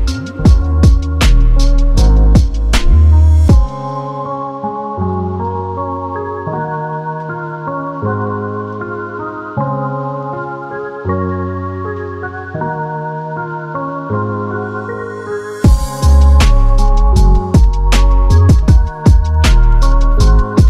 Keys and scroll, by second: 7.0 r.